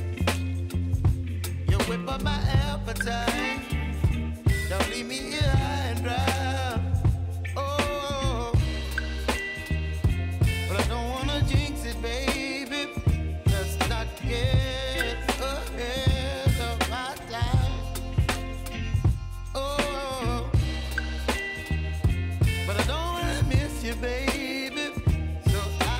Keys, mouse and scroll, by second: 1.2 k, 2.8 n, 3.1 space, 7.1 space, 9.0 click, 9.5 u, 10.4 click, 12.4-13.2 scroll down 1, 13.2 click, 24.7 ctrl+alt+Home, 25.3 click.